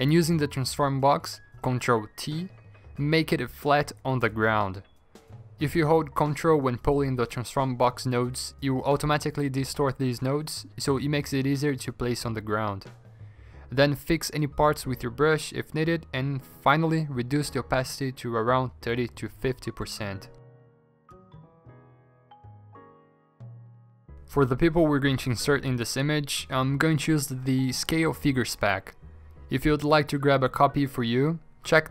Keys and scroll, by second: 0.2 ctrl+j, 0.6 ctrl+t, 2.5 Escape, 4.3 ctrl+t, 15.1 v, 16.1 5, 16.6 3, 18.1 ctrl+j, 18.2 ctrl+t, 19.1 4, 19.4 3, 19.8 ctrl+j, 19.9 ctrl+z, 19.9 ctrl+t, 20.4 3, 20.6 Up, 21.1 ctrl+j, 21.1 ctrl+t, 21.9-26.9 typing, 28.9 BackSpace.